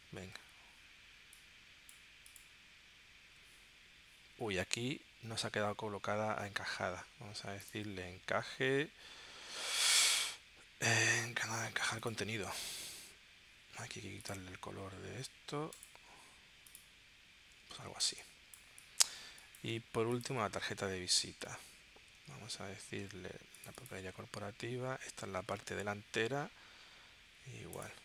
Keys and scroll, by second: 18.1 space, 22.1 super+d.